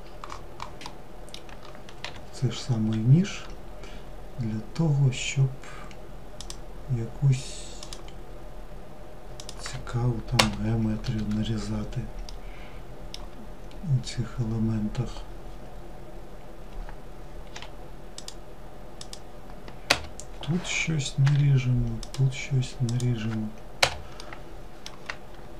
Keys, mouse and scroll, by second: 0.0-1.2 middle drag, 1.2 k, 11.4-14.5 middle drag, 23.3-25.5 middle drag.